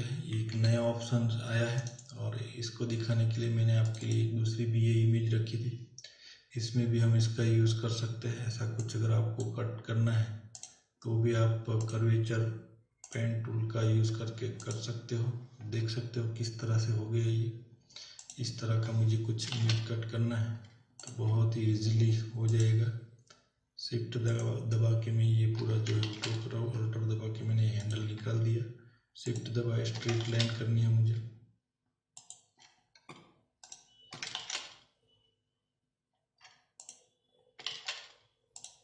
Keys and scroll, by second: 0.5 ctrl+o, 19.8 z, 26.1 ctrl+z, 30.5 z, 37.8 ctrl+z.